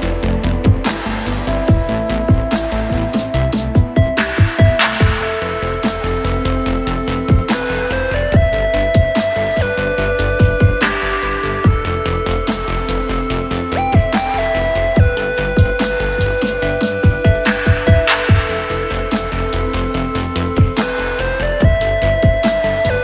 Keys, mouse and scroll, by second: 0.6 alt+middle click, 0.6 alt+scroll up 1, 0.9 alt+click, 1.3 alt+click, 1.9 scroll up 2, 2.2-2.6 alt+middle drag, 2.6 scroll down 1, 2.8 alt+click, 3.2 shift+right click, 3.9 scroll up 3, 4.2 alt+middle click, 4.5 scroll down 1, 4.8-6.7 alt+drag, 6.9 scroll up 2, 7.2 alt+middle click, 7.5 scroll up 2, 7.8 alt+middle click, 8.8 click, 9.3 click, 10.3 click, 11.0-11.4 scroll down 3, 11.6 alt+middle click, 11.9 alt+click, 12.9 click, 13.8 alt+click, 14.6 scroll up 2, 14.9 alt+middle click, 15.5 alt+middle click, 16.1 alt+middle click, 16.7 scroll up 2, 17.1 alt+middle click, 17.3-17.7 scroll up 3, 17.9 alt+middle click, 19.0 click, 19.1 double click, 19.5-21.3 typing, 21.8 middle click, 21.8 alt+scroll down 1, 22.0 alt+click, 22.3 alt+middle click, 22.7 alt+click.